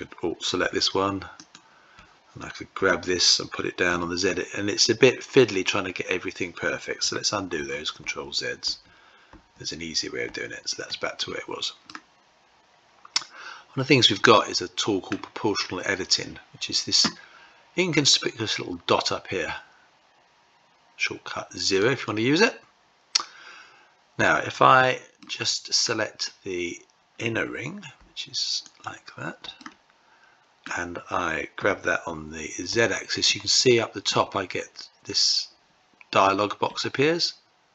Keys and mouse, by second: 2.5 g, 7.3 ctrl+z, 7.8 ctrl+z, 8.4 ctrl+z, 9.0 ctrl+z, 10.0 ctrl+z, 11.6-14.9 middle drag, 21.6 click, 24.9 middle click, 29.4-30.4 middle drag, 31.3 g.